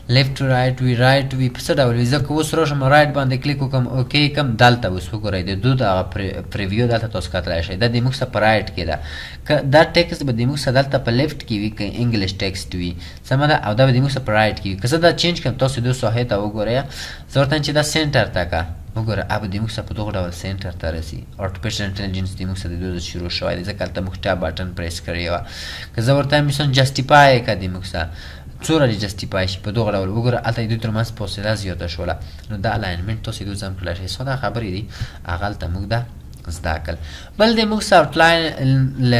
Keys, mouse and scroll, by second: 33.3 double click.